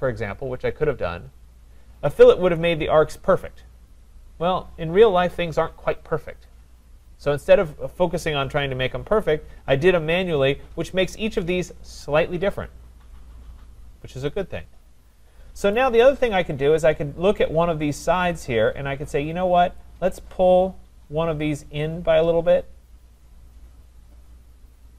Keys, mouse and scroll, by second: 15.8 click, 16.9-19.8 scroll.